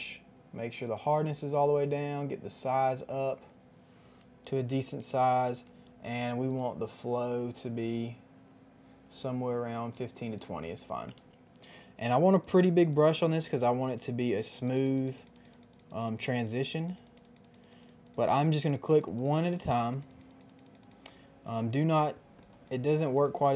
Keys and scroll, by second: 5.6 ], 5.8 ], 11.1 ].